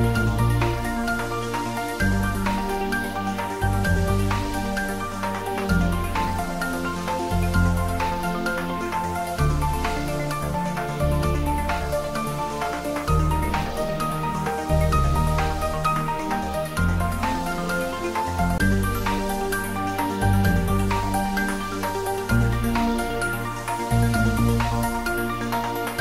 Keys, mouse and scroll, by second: 3.0 Down, 4.4 Return, 5.3 scroll down 1, 6.3 click, 6.6 scroll down 1, 7.4-9.3 middle drag, 9.6 click, 10.1-10.7 middle click, 11.0 click, 13.1-14.8 typing, 17.5 click, 19.3 g, 19.8 x, 20.2 Right, 22.6 space, 23.9 middle click.